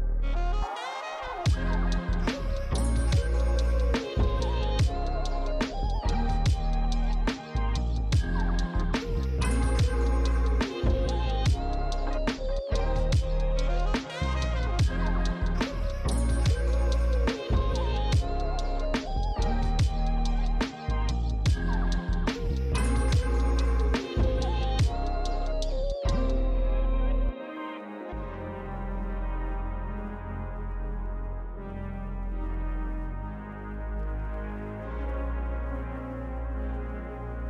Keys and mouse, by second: 0.6 click, 1.1 shift+a, 1.4 click, 2.3-3.8 typing, 2.8 click, 3.2 click, 3.5 click, 12.0 click, 12.5 s, 12.7 click, 13.2 click, 13.9 g, 14.7 click, 14.9 r, 16.7 Tab, 16.8 click, 17.1 g, 17.3 click, 17.5 g, 17.7 click, 17.9 g, 18.0 click, 18.6 alt+s, 18.8 click, 19.4 alt+s, 20.0 click, 20.2 Tab, 20.3 click, 24.1 Tab, 24.5 click, 24.6 alt+s, 24.7 click, 25.2 click, 25.5 alt+s, 25.7 click, 25.8 Tab, 25.9 click, 26.2 shift+d, 27.0 click, 27.1 shift+d, 27.4 click, 27.6 shift+d, 27.9 click, 28.6 g, 28.9 click, 30.7 click, 31.2 g, 31.5 click, 32.2 g, 32.4 click, 33.9 g, 34.0 click, 34.2 g, 34.4 click, 34.6 g, 34.9 click.